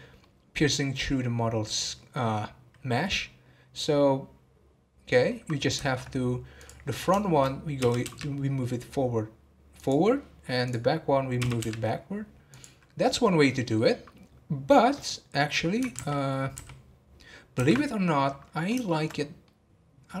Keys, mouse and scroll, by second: 4.8-5.3 scroll down 1, 5.3-7.8 middle drag, 7.8 g, 13.0-19.1 middle drag, 19.1 scroll up 1, 19.4-20.2 middle drag.